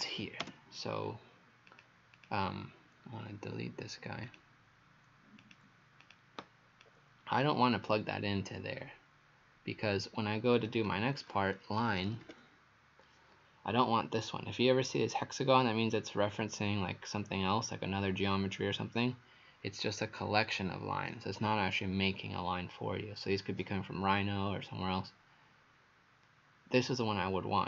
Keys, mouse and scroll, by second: 1.7 click, 2.2 click, 4.3 click, 6.0 click, 6.8 click, 10.8 click, 11.6-12.8 typing.